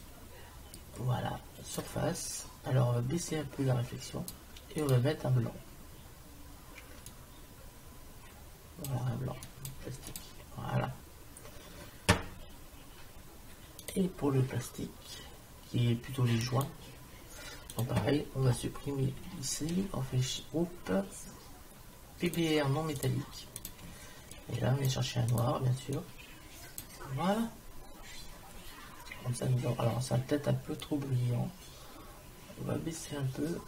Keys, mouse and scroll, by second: 0.8-2.6 drag, 3.3-6.9 drag, 13.9-15.8 drag, 16.5-18.5 drag, 18.5 Delete, 19.7 shift+a, 23.6-27.8 drag, 30.8-32.8 drag.